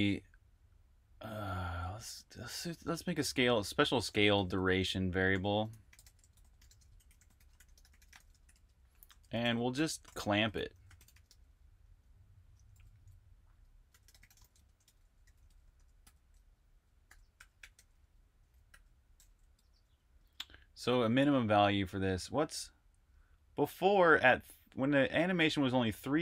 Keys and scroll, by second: 1.8-11.1 typing, 12.3-15.5 typing, 16.6-20.0 typing.